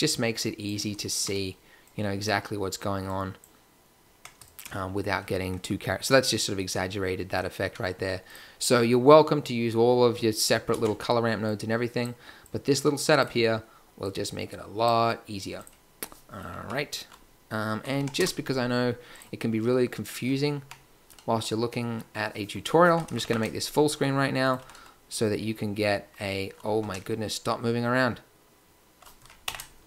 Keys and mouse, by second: 10.7 ctrl+x, 19.1-20.6 drag, 20.6 Tab, 25.3 ctrl+Up, 26.8 g.